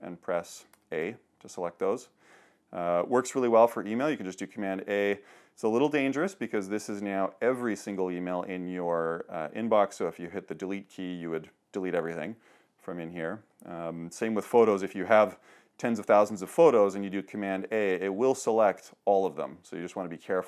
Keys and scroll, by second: 0.7 super+a, 4.5 super+a, 13.4 super+h, 17.7 super+a.